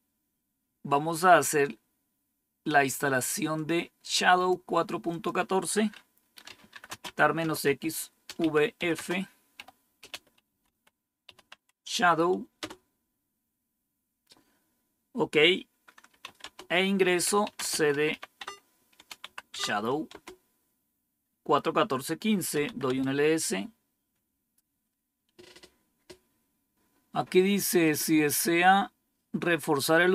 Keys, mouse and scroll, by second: 3.4 click, 5.0 click, 6.1-12.5 typing, 12.5 Tab, 15.7-19.9 typing, 22.5 Tab.